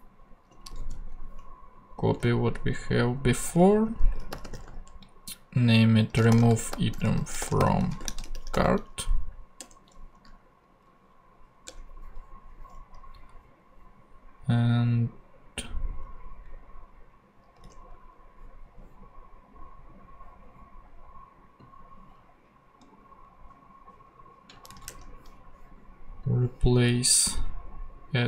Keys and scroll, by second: 0.8 super+c, 2.1 super+v, 3.9-9.0 typing, 9.6 Return, 11.6 Return, 17.6 super+Tab, 24.7 super+c, 24.9 super+Tab.